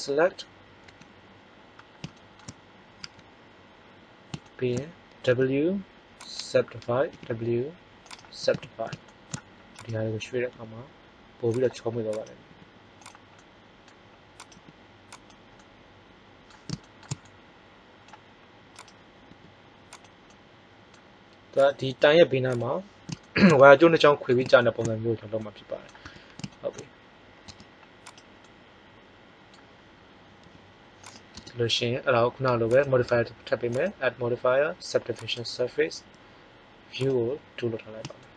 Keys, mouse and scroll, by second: 1.0 a, 2.9 a, 5.3 w, 7.0 w, 10.4 g, 12.4 g, 13.4 middle click, 14.4 right click, 14.4 g, 18.6 right click, 19.2 g, 20.2-21.5 middle drag, 21.5 click, 21.7 g, 22.6 click, 23.2-24.8 middle drag, 26.0 Tab, 27.4 Tab, 30.4 g, 31.1 click, 31.3 Tab.